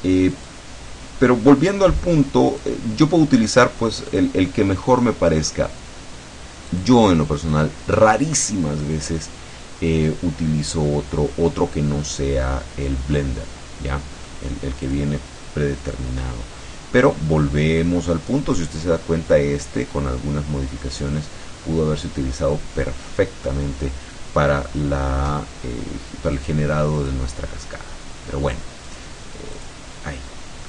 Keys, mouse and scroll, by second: 0.4 click, 2.6 click, 4.2 click, 6.8 click, 8.6-12.3 middle drag, 13.4-14.6 middle drag, 15.0 click, 16.2-17.4 middle drag, 17.9-23.7 middle drag, 26.4 click, 27.0 click, 29.0 click, 29.6 click, 30.4 middle click.